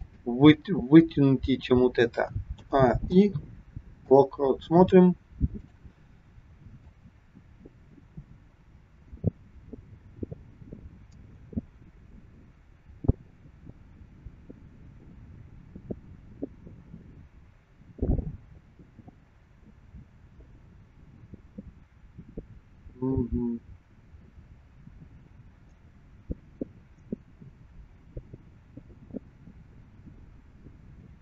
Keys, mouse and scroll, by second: 2.6 a, 3.2 i, 5.6 click, 7.0 click.